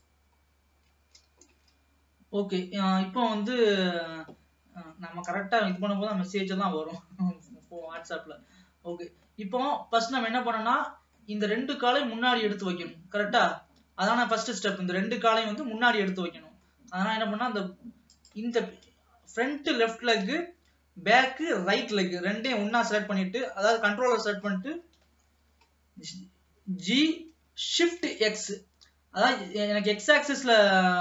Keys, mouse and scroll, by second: 0.6-1.2 scroll down 1, 1.2 ctrl+s, 1.9 ctrl+s, 2.2 scroll up 1, 3.6-6.1 middle drag, 6.1 ctrl+s, 7.5 middle click, 8.1-8.5 scroll up 2, 8.7-13.6 middle drag, 13.6 scroll down 1, 14.5-16.2 middle drag, 16.2-16.8 scroll up 2, 16.8-18.2 middle drag, 18.2 shift+click, 19.1-25.0 middle drag, 25.0 KP_3, 25.8-27.1 scroll up 1, 27.1 g.